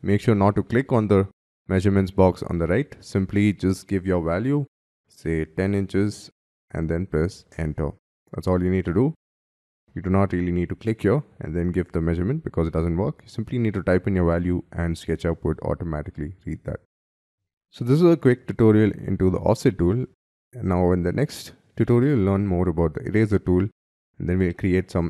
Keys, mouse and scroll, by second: 4.6 1, 5.2 0, 7.3 Return, 18.3-19.3 scroll down 7, 19.3 scroll up 1, 19.6 middle click, 22.1 scroll down 4.